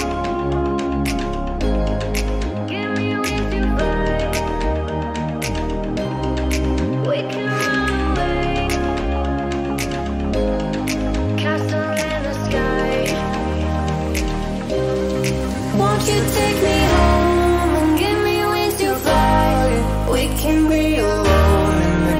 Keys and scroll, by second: 4.0 ctrl+o, 15.2 m.